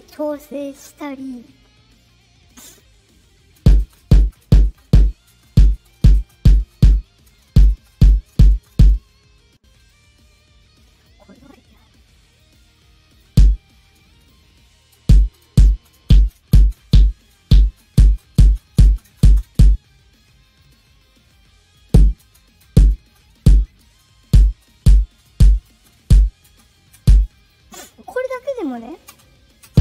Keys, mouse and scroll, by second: 2.4 click, 3.5-8.7 typing, 5.0-6.0 drag, 6.8-7.8 drag, 8.8-9.8 drag, 10.3 click, 11.6 right click, 12.2 click, 12.7 click, 14.0-19.5 typing, 14.2 click, 14.7 click, 19.9 click, 21.2-23.8 drag, 21.8-26.9 typing, 25.8 click, 27.3 click, 28.6 click, 29.0-29.8 typing.